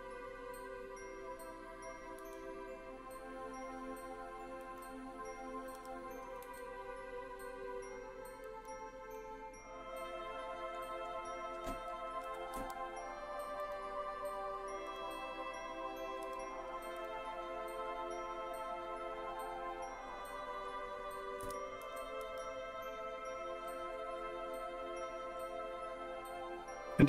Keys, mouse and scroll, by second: 2.3 z, 4.7 click, 5.9 g, 6.5 z, 8.5 click, 9.1-10.9 middle drag, 12.3 g, 12.7 r, 13.7 click, 14.9 click, 16.3 g, 17.1 click, 18.4 scroll up 2, 20.1 scroll down 1, 20.7 scroll down 1, 21.4 KP_1, 21.9 KP_3, 22.3 g, 23.1-23.7 scroll up 3, 23.7-25.7 scroll down 11.